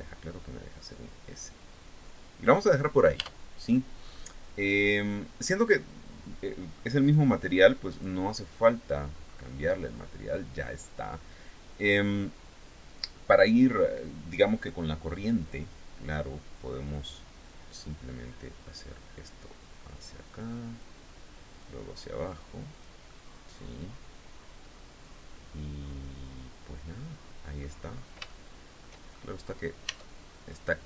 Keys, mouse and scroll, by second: 2.0 click, 2.4 scroll down 1, 2.7 Tab, 3.1-3.4 scroll down 1, 3.6 scroll up 1, 5.3 scroll down 1, 6.6 click, 7.4 click, 8.2-8.7 scroll down 1, 8.8-9.2 scroll up 1, 9.3-9.7 scroll up 1, 9.8-10.1 scroll down 1, 17.0-20.5 drag, 21.1-22.5 drag, 22.6-27.3 middle drag, 27.4-27.8 scroll up 1, 27.8 shift+middle click, 28.6 shift+scroll up 1, 29.4 Tab, 30.0 right click.